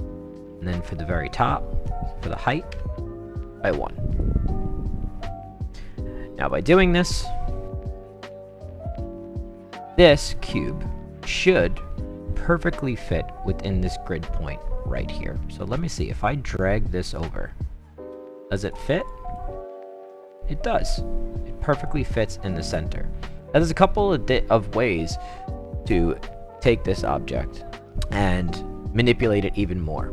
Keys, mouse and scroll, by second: 1.3 click, 2.3 click, 2.7 1, 4.1 click, 6.5-9.9 right drag, 15.8-18.7 drag, 19.0 click, 19.3-21.8 right drag, 22.2-22.6 right drag, 22.7-24.3 right drag, 26.5 click.